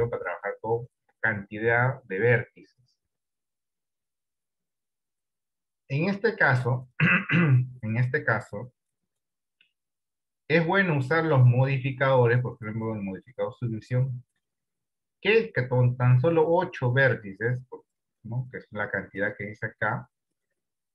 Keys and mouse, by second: 16.7 click.